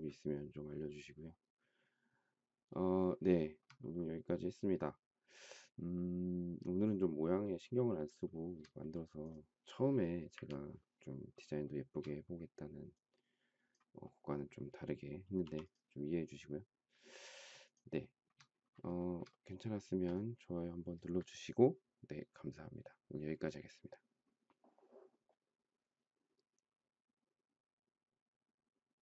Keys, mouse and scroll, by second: 3.6 shift+middle click, 8.5 shift+middle click, 10.5 Delete, 11.8 shift+middle click, 15.6 m, 17.7 shift+click, 18.2 shift+middle click, 19.2 shift+middle click, 19.3 shift+middle click, 20.0 space.